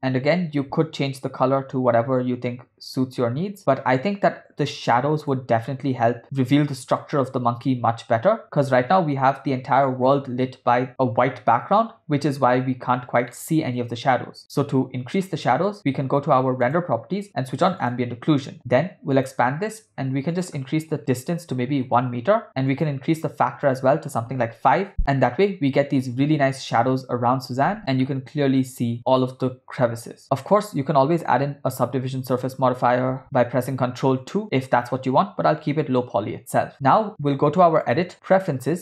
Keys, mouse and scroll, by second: 5.1-5.7 drag, 5.7-6.2 ctrl+middle drag, 13.3 ctrl+middle click, 16.7 click, 17.9 click, 19.2 click, 20.4-21.8 drag, 22.7 click, 23.7-24.8 drag, 28.1-29.0 ctrl+middle drag, 31.4 ctrl+2, 33.3 ctrl+z, 36.5 ctrl+z, 37.9-38.8 drag.